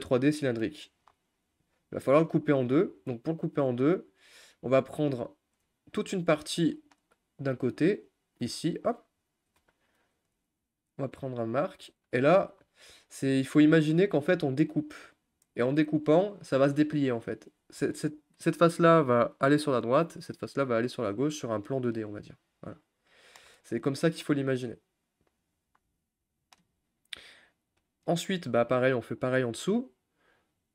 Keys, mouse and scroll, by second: 0.6 middle click, 1.0-1.7 scroll up 4, 1.7 click, 2.3 click, 2.5-3.7 middle drag, 3.7 click, 5.0-6.1 middle drag, 6.1-6.8 scroll down 3, 6.8-8.1 middle drag, 8.1 ctrl+click, 8.6-11.0 middle drag, 11.0 u, 11.2 scroll down 1, 11.4-13.2 middle drag, 13.2-13.7 scroll up 2, 13.7-21.6 shift+middle drag, 23.1 middle click, 23.5 scroll down 1, 23.6-25.5 shift+middle drag, 25.5 click, 25.8 middle click, 26.7-27.6 scroll up 1, 28.1 shift+click.